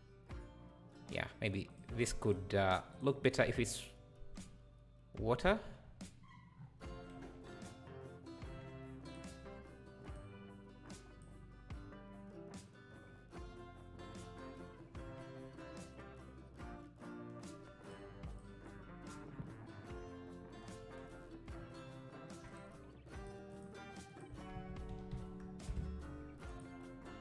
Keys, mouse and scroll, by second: 5.7 scroll down 2, 6.5 scroll down 8, 10.1-13.9 drag, 17.9 click, 18.4 click, 23.2-25.7 drag, 25.7 s.